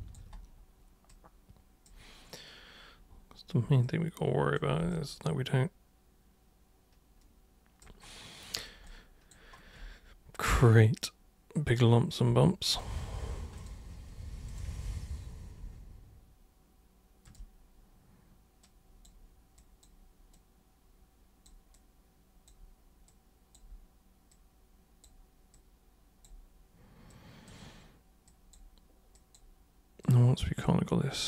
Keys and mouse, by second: 1.0 super+click, 3.8 super+click, 4.9-7.8 alt+super+drag, 8.8 alt+super+click, 10.6-11.6 drag, 12.6 ctrl+click, 13.5 shift+click, 14.4 shift+click, 17.2 shift+click, 18.6 click, 19.5 super+click, 20.3-21.4 super+drag, 21.7 super+click, 23.0 super+click, 24.3 super+click, 25.5 super+click, 27.1 super+click, 28.2 super+click, 29.1 super+click, 30.0 super+click, 31.1 super+click.